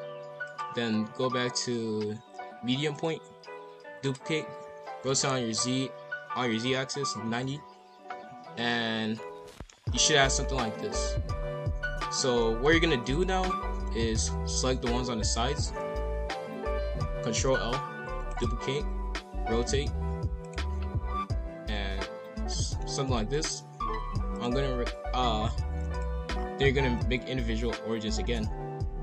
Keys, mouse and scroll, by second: 0.4-3.5 drag, 3.9 shift+d, 4.6 r, 8.4-9.8 middle drag, 9.8 scroll down 1, 10.0-11.2 scroll up 8, 10.0 middle click, 11.4 scroll down 1, 11.8 a, 12.4 middle click, 13.1 click, 13.8-15.4 middle drag, 15.4 shift+click, 15.8 KP_5, 15.9 KP_1, 17.4 ctrl+l, 18.2 shift+d, 19.0 r, 21.5-23.3 middle drag, 23.3-24.3 scroll up 1, 24.3-26.2 drag, 26.2 scroll down 1, 28.2 s.